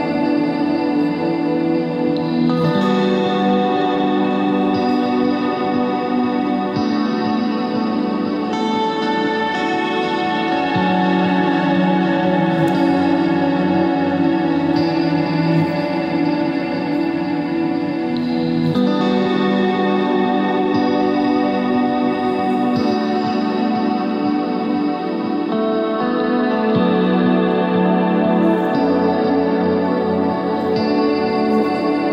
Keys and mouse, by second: 3.6 click, 3.9-5.1 drag, 5.7-6.7 drag, 8.4-10.4 drag, 12.2-14.7 drag, 15.6 middle click, 17.4 z, 18.2 KP_1, 19.1 Tab, 19.7 Tab, 20.8 z, 22.4 z, 22.6 z, 23.1 x, 24.5 x, 27.1 ctrl+j, 28.1 KP_1, 28.3 z, 29.0 shift+d, 29.9 z.